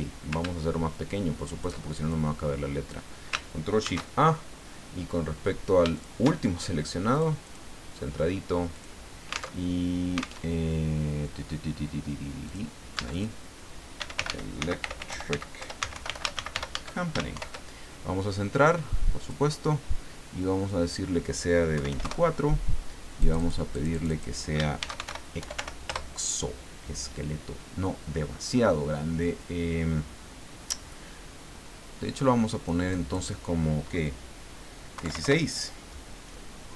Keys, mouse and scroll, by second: 0.9 ctrl+shift+click, 2.1-3.1 ctrl+shift+drag, 3.8 ctrl+shift+a, 5.9 shift+click, 7.1 click, 7.4 click, 8.7 click, 9.7 alt+Tab, 10.4 alt+Tab, 12.5 click, 13.1 click, 13.7-17.0 typing, 17.4 ctrl+shift+Home, 19.2 click, 20.7 click, 21.7 KP_2, 21.9 KP_4, 22.0 KP_Enter, 23.2 click, 24.5-26.0 typing, 32.9 click, 34.9 KP_1, 35.0 KP_6, 35.2 KP_Enter.